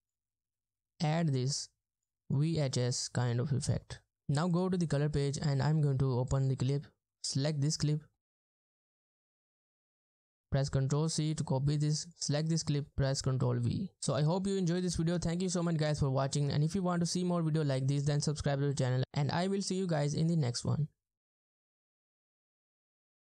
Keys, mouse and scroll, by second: 10.1 right click, 10.9 right click, 11.1 ctrl+c, 13.6 typing.